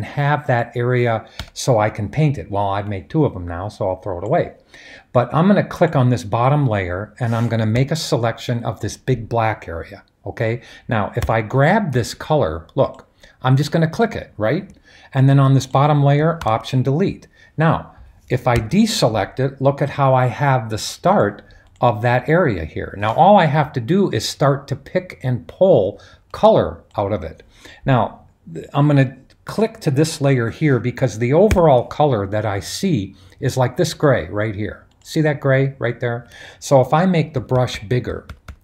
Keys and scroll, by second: 1.4 Return, 11.3 b, 16.5 alt+BackSpace, 18.5 super+d, 31.5 b, 37.0-38.6 typing.